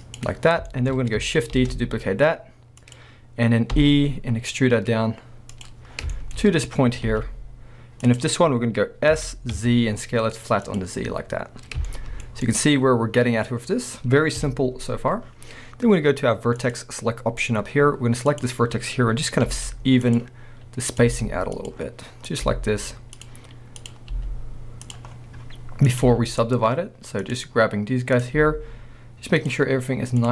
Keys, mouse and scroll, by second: 0.2 click, 0.5 scroll down 1, 0.7 shift+middle click, 1.0-1.6 scroll up 1, 1.6 shift+d, 3.0 click, 3.8 e, 5.6 click, 5.9 scroll down 1, 6.2 shift+middle click, 6.4 scroll up 1, 7.1 g, 8.2 click, 8.5-9.2 scroll up 1, 9.2 s, 10.8 click, 10.9 scroll down 1, 11.9 shift+middle click, 12.5 middle click, 13.5-14.4 scroll up 1, 14.4 KP_1, 14.9-16.6 scroll up 1, 16.6 click, 17.7-18.3 scroll up 1, 18.3 click, 18.6-19.5 scroll up 1, 19.5 g, 20.2 click, 20.9 click, 21.1 g, 21.7 click, 22.3 click, 22.5 g, 23.8 click, 24.1 g, 24.9 click, 25.1-25.9 scroll down 2, 25.9 click, 26.0 g, 27.3 click, 28.1 click, 28.4 g, 29.5 click, 30.2 click.